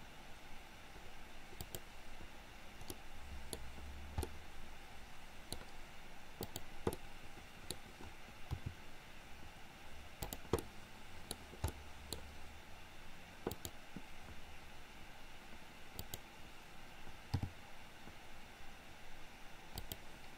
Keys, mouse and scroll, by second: 3.0-3.5 middle drag, 4.4-5.6 middle drag, 6.5 click, 7.0-7.7 middle drag, 8.6 r, 10.6-11.4 middle drag, 11.7-12.1 scroll up 1, 12.1-13.5 scroll down 1, 13.5 click, 16.0 click, 17.5 g.